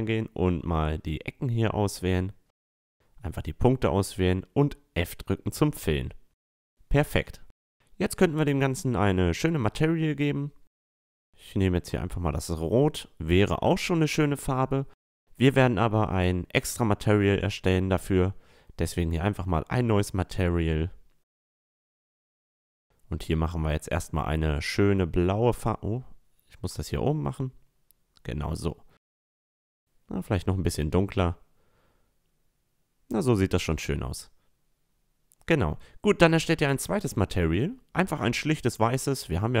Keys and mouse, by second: 0.3-3.7 right drag, 3.2 f, 3.4 a, 3.7 Tab, 3.7-4.3 middle drag, 4.4 middle drag, 4.5-4.9 middle drag, 5.8 a, 7.2-8.8 drag, 7.2-11.1 right drag, 9.0-11.6 drag, 12.3-13.0 middle drag, 14.4-17.8 middle drag, 17.1-20.9 drag, 20.4 o, 22.8-24.8 drag, 26.0-27.9 drag, 28.9-30.8 drag, 33.5-35.2 drag, 36.3-38.5 drag, 38.5-39.6 middle drag.